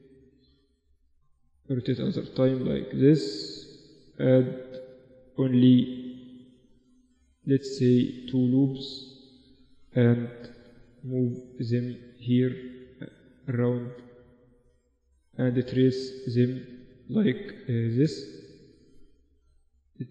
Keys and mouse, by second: 1.2 r, 2.6 Tab, 3.5 ctrl+r, 5.2 ctrl+z, 6.7 ctrl+r, 9.9-12.0 right drag, 10.7 g, 12.0 middle click, 12.7-19.9 right drag, 12.9 g, 14.1 g, 15.5 g, 17.1 g, 18.2 g.